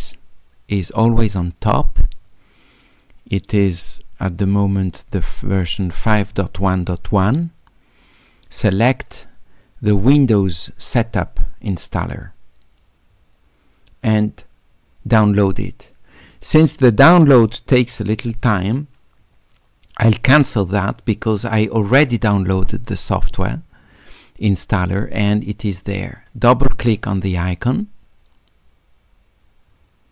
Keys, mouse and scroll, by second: 11.6 click, 20.7 click, 22.0 click, 26.6 click, 26.8 click.